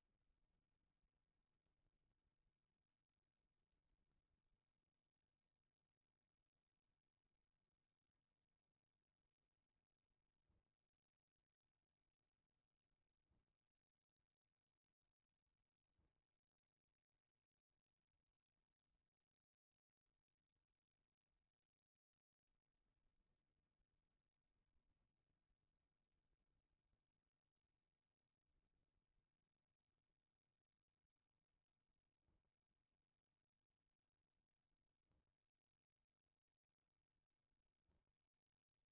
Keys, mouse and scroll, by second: 5.7-8.0 drag, 9.4 click, 10.9 click, 14.4 click, 16.0 click, 17.1 click, 18.3 click, 20.4 click, 22.2 click, 22.5 click, 25.4 click, 26.1 middle click, 26.7 click, 31.4 middle click, 32.3 click, 36.6 middle click, 37.4 click, 38.3 middle click.